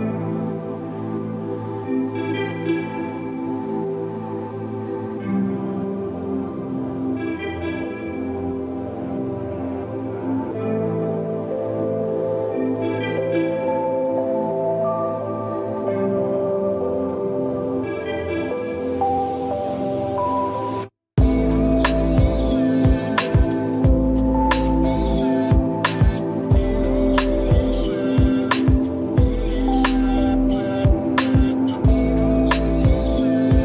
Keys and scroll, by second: 4.9 space.